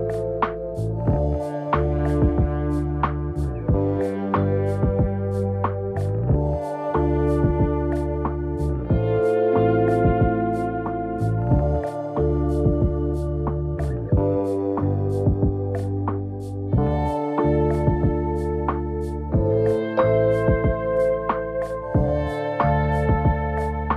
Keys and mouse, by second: 0.0 g, 3.4 g, 4.8 a, 5.0 right click, 5.0 a, 5.5 shift+click, 6.3 ctrl+j, 6.9 z, 7.1 middle drag, 7.4 a, 7.4 a, 7.6-8.3 middle drag, 8.4 right click, 8.6 Tab, 9.2 shift+middle click, 9.5 shift+middle click, 9.9 middle click, 10.2 shift+middle click, 10.7 right click, 11.4 m, 12.4 a, 12.6 right click, 12.6 a, 12.9 middle click, 13.2 shift+middle click, 13.8 click, 14.4 ctrl+z, 14.7 shift+click, 15.1 m, 15.9 shift+middle click, 16.3 shift+middle click, 17.9 shift+middle click, 18.1 middle click, 19.1 shift+middle click, 19.6 shift+right click, 20.2 m, 20.6 right click, 20.8 shift+right click, 21.2 m, 21.9 a, 22.1-23.4 middle drag, 22.1 a.